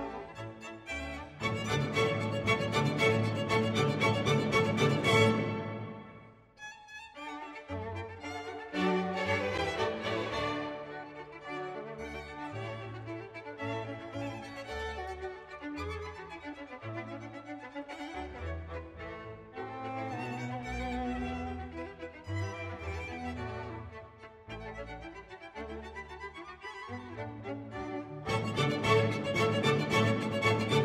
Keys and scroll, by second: 6.6 space.